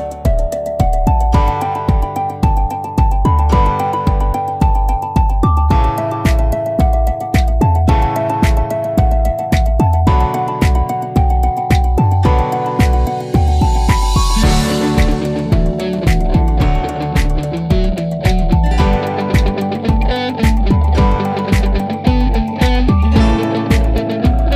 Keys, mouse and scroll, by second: 0.9-9.8 drag, 14.1 ctrl+e, 16.3 click, 17.0 click, 17.2 ctrl+t, 18.9 right click, 20.7-24.5 drag.